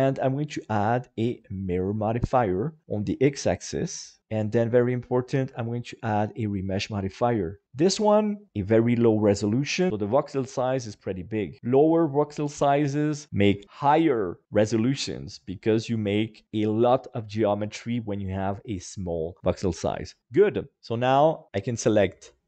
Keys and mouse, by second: 2.9-4.2 middle drag, 4.2-5.7 drag, 6.8 middle click, 20.5 middle click, 20.9 middle click, 21.8 middle click.